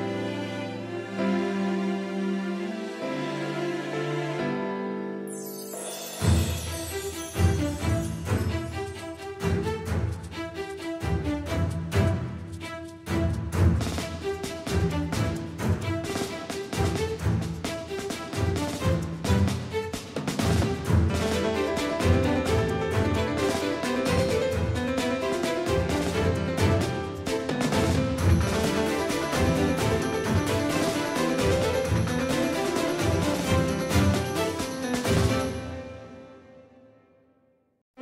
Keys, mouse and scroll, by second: 0.2 e, 5.1 s, 8.9-11.0 right drag, 11.0-13.2 drag, 12.5-13.9 right drag, 15.1 s, 19.1 middle click, 21.6-24.4 middle drag, 24.4 z, 25.3 Tab, 27.2-29.5 middle drag, 32.9-35.9 middle drag, 33.9 Tab, 36.5 z.